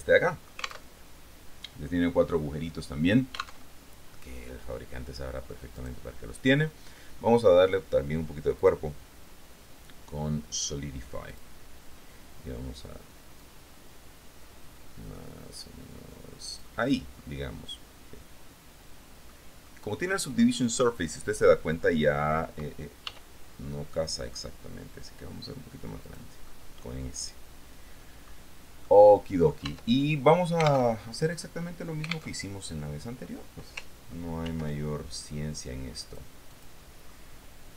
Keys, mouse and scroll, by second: 1.1 alt+Tab, 3.8 alt+Tab, 4.4 middle click, 5.2 click, 8.8 click, 11.5 click, 13.6-17.0 drag, 17.4-19.6 middle drag, 19.8 middle click, 23.2 s, 26.2 click, 26.5-28.6 middle drag, 29.0 middle click, 29.8 Tab, 31.1 alt+Tab, 32.6 alt+Tab, 34.6 ctrl+r, 36.2 click, 36.7 click, 37.3-37.7 middle drag.